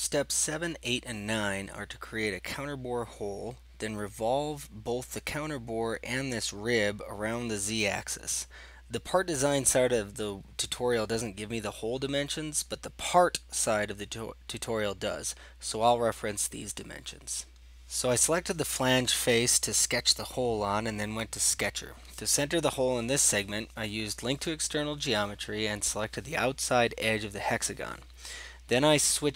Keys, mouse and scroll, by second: 16.7 click, 17.2 scroll up 7, 17.3 scroll down 8, 18.0 scroll up 1, 18.3 scroll, 19.4 click, 20.0 click, 21.2-22.0 scroll, 24.7 right click, 24.8 click, 25.6 click, 25.9 click, 26.3 4, 26.4 Return, 27.6 right click.